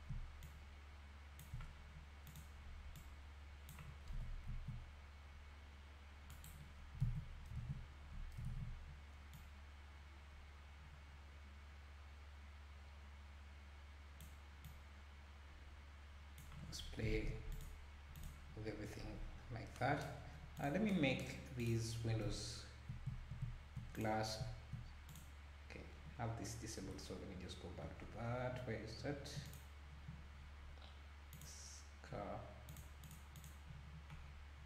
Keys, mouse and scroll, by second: 2.9 click, 4.1 r, 7.0 alt+a, 7.7 ctrl+s, 8.5 ctrl+s, 9.4-12.4 drag, 14.7-17.2 drag, 17.2 ctrl+s, 17.5 click, 18.2 click, 18.7-19.4 scroll down 6, 19.4-19.7 scroll up 2, 20.1-20.6 scroll up 1, 20.6 click, 21.6 click, 23.9 click, 25.1 click, 26.5 scroll down 1, 28.2 scroll down 9, 29.5 click, 30.4-31.2 scroll down 1, 31.3 click, 32.7 click, 33.0 click, 33.4 click, 34.2-34.6 scroll down 1.